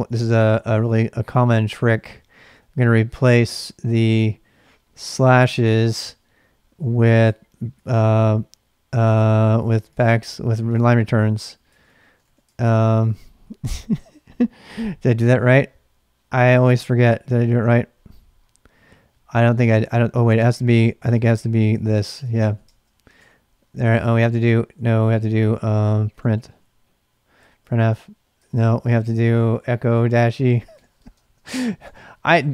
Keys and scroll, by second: 1.7-2.4 typing, 6.8-7.8 typing, 9.2-10.4 typing, 10.7 Return, 11.6-13.9 typing, 20.0-32.5 typing, 27.6 Return.